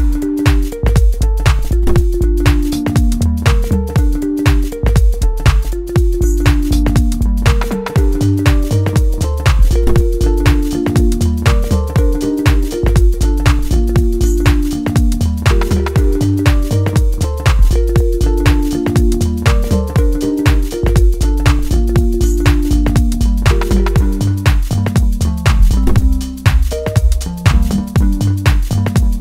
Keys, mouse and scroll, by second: 6.4-9.3 middle drag, 9.3-12.1 drag, 12.1-15.6 middle drag, 15.6-19.9 drag, 19.9-22.1 middle drag, 22.1 click, 22.5-24.5 middle drag, 24.5-27.3 drag, 27.3-29.2 middle drag.